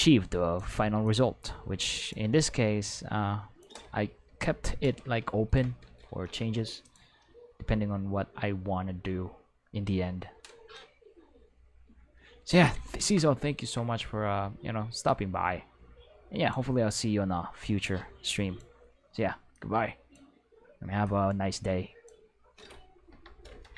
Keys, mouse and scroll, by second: 1.1-2.1 drag, 2.4-3.6 drag, 4.3 Return, 6.8 click, 15.1-16.5 drag, 17.0-18.6 drag, 19.5 click, 21.1-22.1 drag, 23.1 Return.